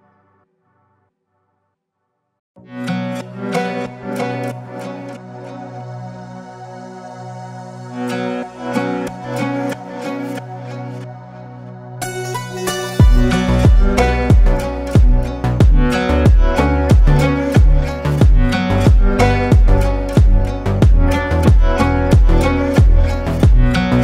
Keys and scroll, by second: 2.3 ctrl+space, 2.9 ctrl+space.